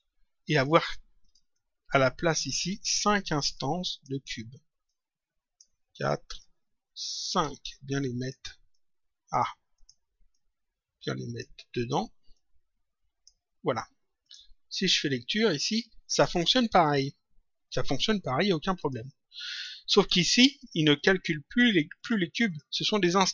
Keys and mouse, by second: 0.0 Delete, 0.5 click, 1.4 ctrl+click, 3.5 ctrl+click, 4.8 ctrl+click, 6.3 ctrl+click, 8.1 shift+click, 12.3 click, 14.2 click, 15.4 click, 18.6 click.